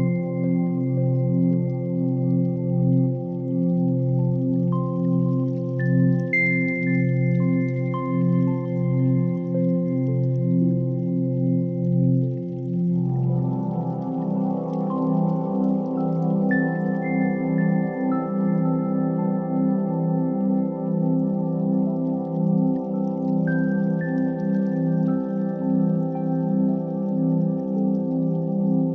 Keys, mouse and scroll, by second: 0.0 z, 1.6 click, 2.1-2.5 middle drag, 2.9 s, 3.1 y, 4.5 click, 4.9 Tab, 5.5 Tab, 6.0 ctrl+a, 7.5 Tab, 7.8 2, 9.4-11.9 drag, 12.7 ctrl+b, 16.3 click, 17.5 click, 18.6 click, 19.5 shift+middle click, 19.9 click, 20.8 click, 21.1 middle click, 22.9 x, 26.2 middle click, 27.2 KP_1, 28.3 1.